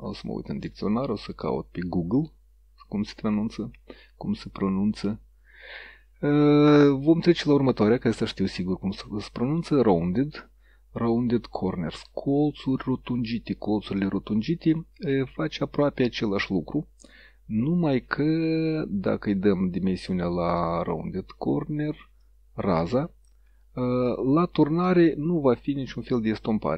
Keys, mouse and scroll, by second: 0.1 click, 0.7 click, 1.5 click, 14.0-15.9 drag, 20.6 click, 22.3-23.7 drag, 24.9 click, 25.9 click.